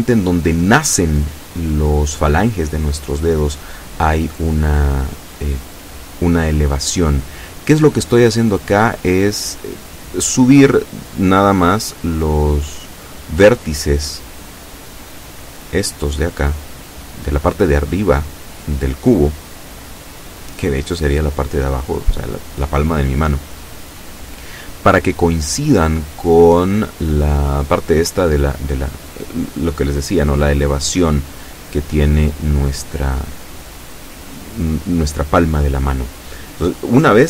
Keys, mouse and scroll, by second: 0.7-3.7 drag, 5.2 right click, 5.7 shift+right click, 6.5-7.7 shift+drag, 7.6 ctrl+z, 8.8 a, 10.6-11.7 middle drag, 11.9 shift+right click, 12.3 shift+right click, 14.0 KP_7, 15.3-17.7 drag, 18.4 middle click, 19.6 right click, 20.5 KP_7, 22.6-24.6 drag, 25.0 right click, 25.4-26.4 middle drag, 27.1 right click, 28.2 KP_7, 29.6 right click, 30.0-31.1 middle drag, 31.3 right click, 32.0 KP_7, 32.9-36.7 drag, 37.1 alt+shift+right click.